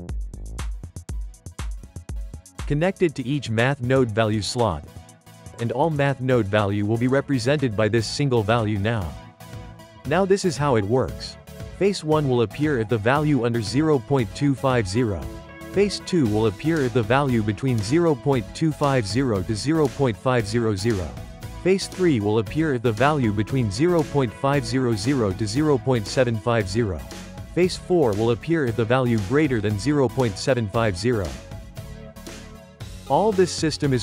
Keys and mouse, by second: 1.9 click, 3.6 click, 5.5 click, 7.2 shift+middle click, 8.2-12.0 drag, 12.0-13.2 ctrl+middle drag, 13.2-16.5 drag, 16.5-19.0 shift+middle drag, 19.0-22.0 drag, 22.0-24.4 drag, 25.7 click, 26.7-31.2 drag, 31.2-33.6 shift+middle drag, 33.7 click.